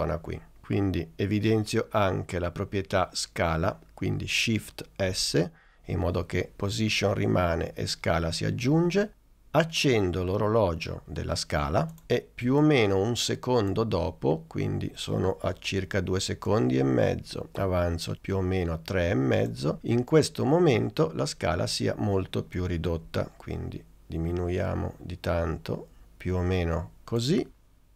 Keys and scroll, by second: 5.1 shift+s.